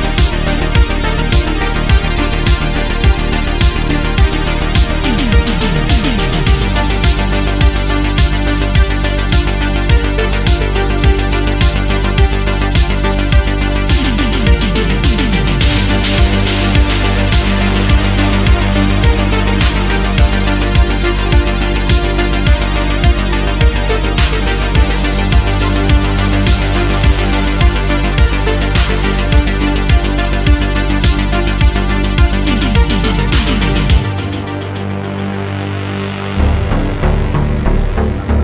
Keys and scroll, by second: 0.6 ctrl+z, 1.2 ctrl+shift+z, 4.1 ctrl+z, 5.0 ctrl+z, 5.5 ctrl+z, 7.3 ctrl+z, 9.6 ctrl+z, 16.2 space, 17.9 space, 28.4 space, 29.2 space, 37.4 ctrl+z, 38.1 ctrl+z.